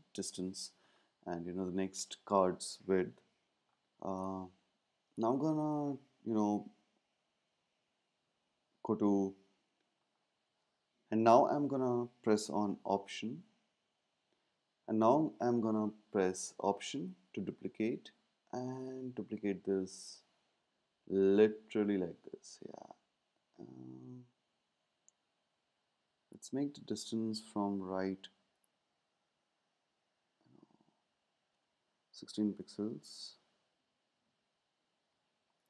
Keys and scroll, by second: 32.7 Right, 32.8 Right, 34.1 Left.